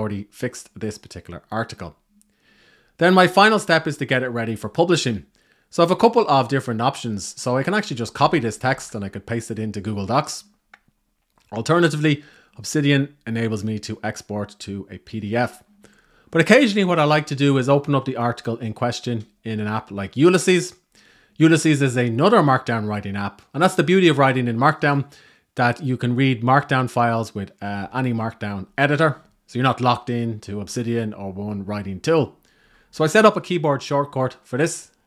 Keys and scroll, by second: 7.8 super+a, 8.3 super+c.